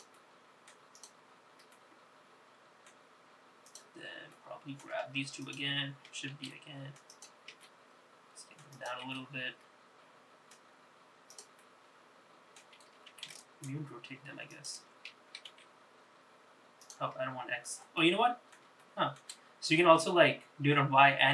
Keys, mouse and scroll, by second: 0.2 middle click, 1.0 click, 1.8-3.0 middle drag, 3.8 click, 4.4 middle click, 5.5 shift+click, 6.5 shift+d, 7.6 s, 9.1 g, 11.7-12.7 middle drag, 13.2 r, 15.6 g, 18.1 middle click, 18.9 shift+middle click.